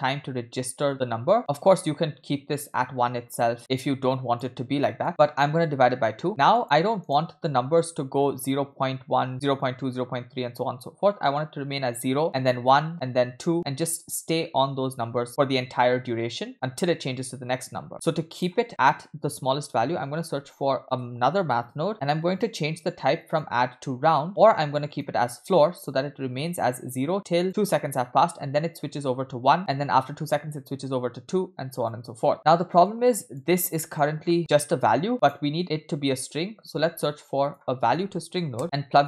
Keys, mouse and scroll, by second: 3.8-4.5 drag, 5.1 middle drag, 5.1 click, 6.2 shift+a, 15.3 middle click, 15.3-15.9 scroll up 1, 16.5 middle click, 17.9-18.4 scroll down 1, 17.9 shift+a, 21.1 BackSpace, 21.3 BackSpace, 23.3-25.1 drag, 26.4-27.4 drag, 31.8 drag, 32.3 drag, 32.9 click, 33.8 middle click, 34.1 scroll down 1, 34.8 middle click, 34.8 scroll down 2, 34.9 drag, 36.7 shift+a.